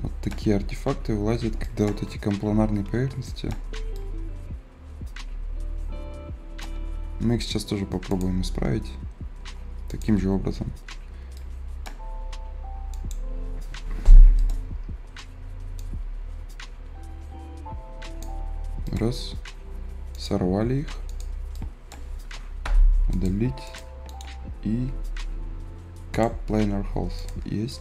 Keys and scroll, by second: 2.3 ctrl+z, 22.5 Delete.